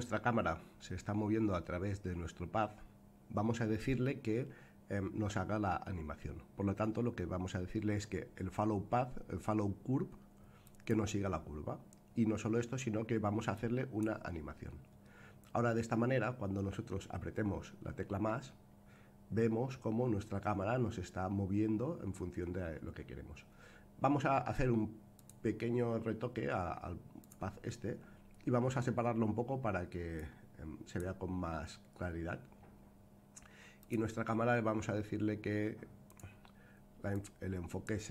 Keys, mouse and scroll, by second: 10.7 click, 13.5 click, 17.3-18.3 scroll down 1, 18.3 space, 25.1 click, 27.2 click, 28.2 scroll down 1, 30.1-31.0 drag, 33.8 click, 36.0 click, 37.1-38.1 drag.